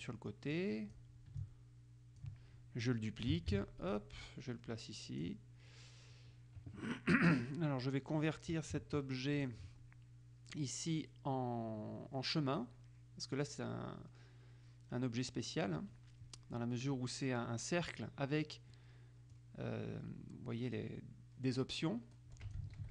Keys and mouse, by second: 1.5 ctrl+click, 3.7 ctrl+d, 4.1-5.9 ctrl+drag, 9.5 click, 19.5-22.9 drag.